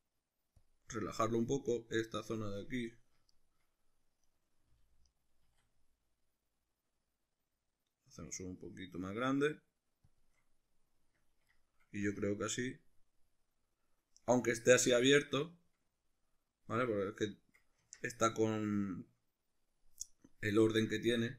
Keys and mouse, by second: 0.7 click, 2.1 right click, 3.3-4.3 shift+middle drag, 4.3 right click, 4.7 g, 5.2 right click, 5.5 s, 9.5 click, 10.3 shift+click, 11.5 click, 11.6-20.7 middle drag, 12.1 Tab, 17.9 Tab, 20.7 right click.